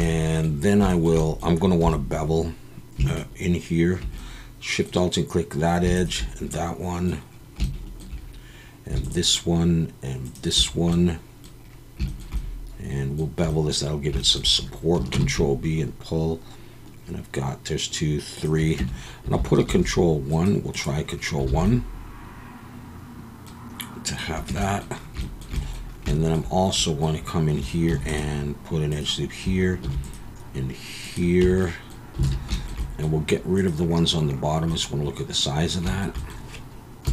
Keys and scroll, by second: 1.8 2, 15.1 ctrl+b, 18.8 Tab, 19.7 ctrl+1, 21.5 alt+a, 24.5 Tab, 27.9 ctrl+r, 29.8 ctrl+r, 31.4 Tab, 32.2 alt+a, 37.0 KP_3.